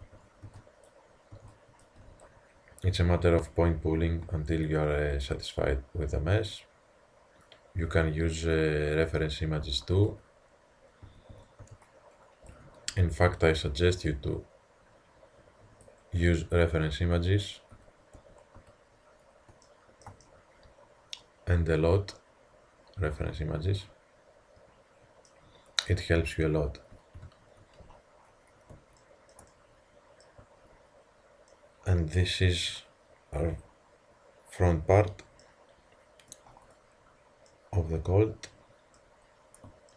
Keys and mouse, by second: 0.0-2.0 typing, 4.3 s, 9.7 a, 10.1 z, 11.1 a, 11.3 a, 11.7 b, 12.9 z, 14.1-16.0 drag, 16.7-19.7 middle drag, 17.8 z, 18.2 Tab, 18.6 z, 27.2 ctrl+KP_3, 28.3-30.5 middle drag, 35.2 middle click, 35.3-38.2 middle drag.